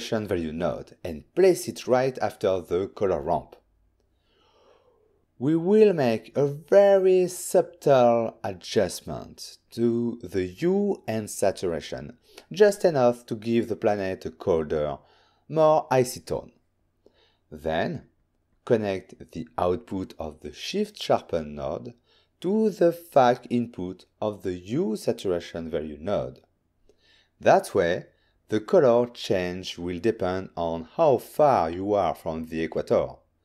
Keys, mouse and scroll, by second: 0.8 shift+d, 2.4 click, 2.9 click, 3.6 scroll up 3, 4.5 ctrl+middle click, 6.3 click, 8.7-10.6 typing, 10.3 Tab, 11.8 typing, 12.2 Return, 13.2 click, 13.7 ctrl+shift+click, 14.4 click, 14.6 click, 15.4 m, 18.3-18.7 scroll down 3, 19.3 middle click, 19.3 m, 20.0 click, 23.8 ctrl+shift+click, 25.5 ctrl+shift+click, 26.7 click, 27.5 m, 29.0 m, 31.7 click, 32.0 m, 32.7 m.